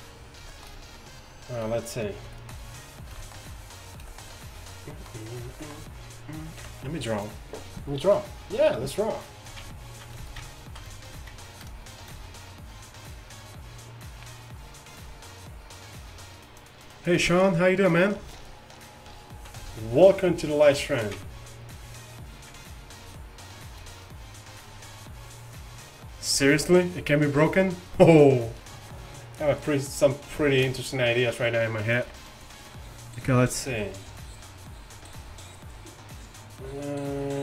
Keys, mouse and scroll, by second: 4.2-4.9 middle drag, 6.7 KP_1, 32.1 KP_1, 33.8-37.4 d.